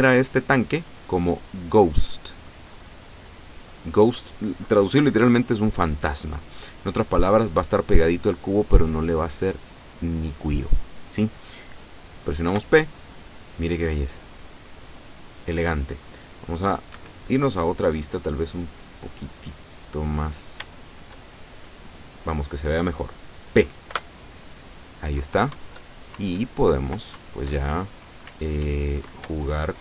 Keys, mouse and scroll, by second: 3.0 click, 12.5 p, 17.0 Escape, 17.6-18.8 middle drag, 18.8-19.4 scroll down 2, 19.6 middle click, 20.3 scroll up 2, 20.7-22.2 shift+middle drag, 24.0 p, 25.6 Up, 26.8 Left, 27.2 Right, 28.4 w, 28.8 Up.